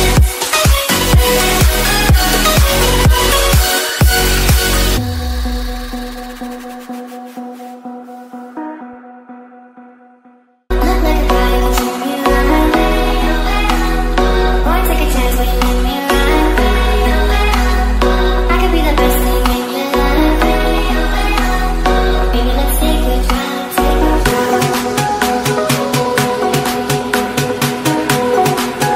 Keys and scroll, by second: 12.1 ctrl+space.